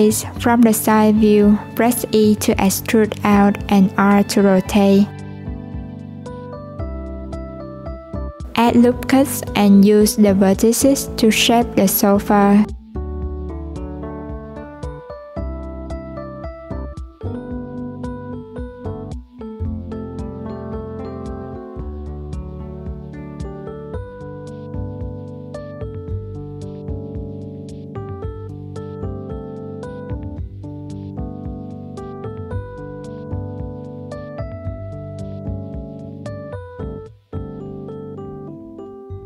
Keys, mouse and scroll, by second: 1.0 e, 9.4 ctrl+r, 10.8 click, 11.6 click, 14.4 click, 15.2-16.0 scroll down 2, 16.0 ctrl+r, 17.2 click, 18.2 click, 21.9 click, 22.7 alt+z, 23.9 Tab, 25.4-27.5 drag, 28.1 Tab, 28.9 click, 30.5 Tab, 31.8 click, 34.2 click, 35.0-35.7 scroll down 2, 35.7 Tab, 36.4 alt+z, 36.7 click, 37.9 click.